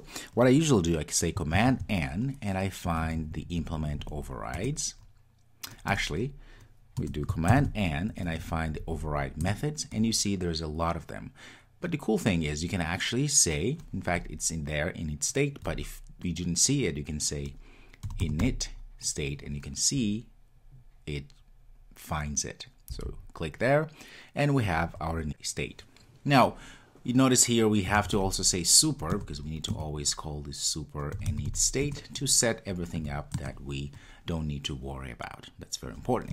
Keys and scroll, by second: 7.7 super+n, 29.3 Return.